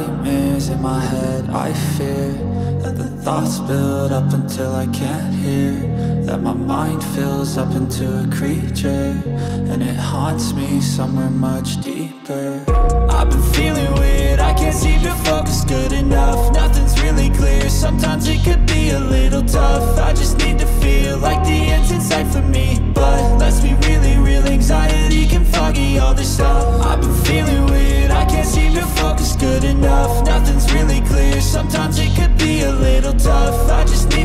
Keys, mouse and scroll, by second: 8.3 alt+shift+click, 13.6 Return, 23.3 ctrl+z, 29.8 alt+click, 33.2 |.